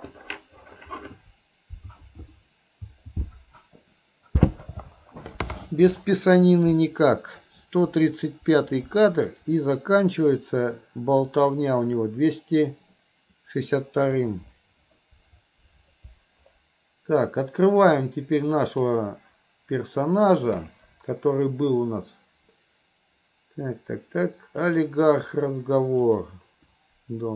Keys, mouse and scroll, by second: 11.4 click, 18.7-27.3 drag.